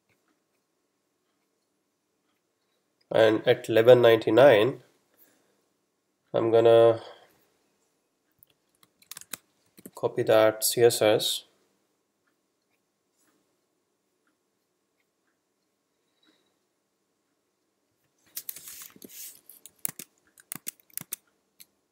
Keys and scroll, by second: 9.0 super+Left, 9.3 shift+super+Down, 9.8 shift+super+c, 10.4 super+c, 18.6 Return, 19.2 super+v, 20.6 Tab.